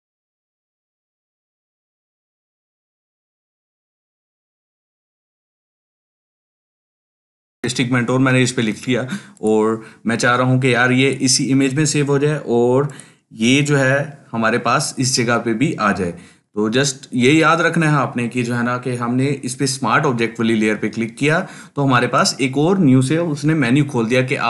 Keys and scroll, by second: 5.9-8.0 typing.